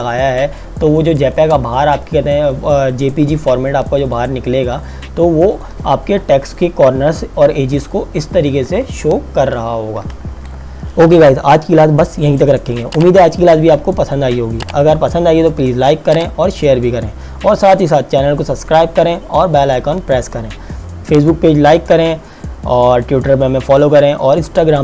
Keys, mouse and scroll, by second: 0.3 click, 2.4 click, 6.6 z, 6.9 click, 8.9 KP_Subtract, 10.2 KP_Subtract.